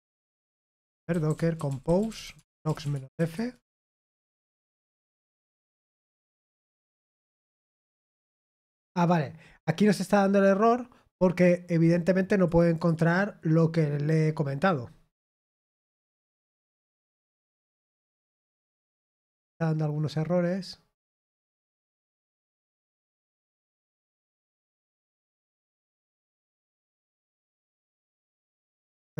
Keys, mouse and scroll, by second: 0.3-3.6 typing, 11.8-13.4 drag, 18.8-29.1 drag.